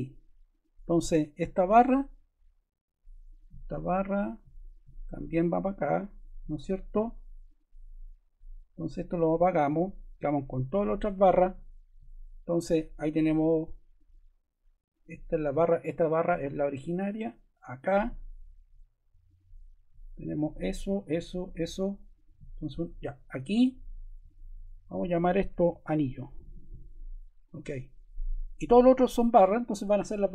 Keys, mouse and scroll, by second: 21.4 click, 22.1 click, 25.3-27.1 typing, 27.4 click.